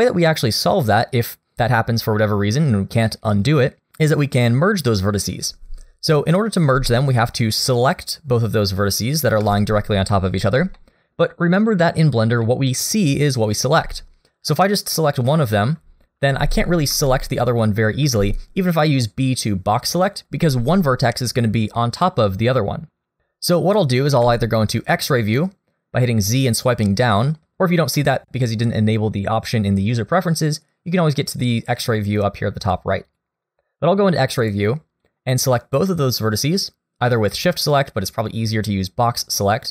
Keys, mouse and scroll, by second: 6.4 middle click, 6.9 shift+middle click, 7.3 scroll up 1, 9.4 1, 10.8 shift+middle click, 12.4 middle click, 13.5 click, 16.3 g, 18.0 b, 24.2 z, 32.6 click, 33.1 click, 34.4 click, 35.0 click.